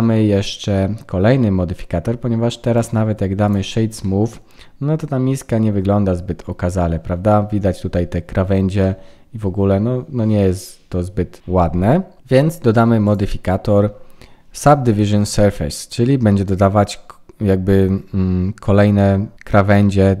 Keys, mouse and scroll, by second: 2.7 right click, 4.0 middle click, 6.2-8.2 scroll up 5, 8.2 scroll down 2, 8.3-9.5 scroll down 4, 8.8 middle click, 13.0 click.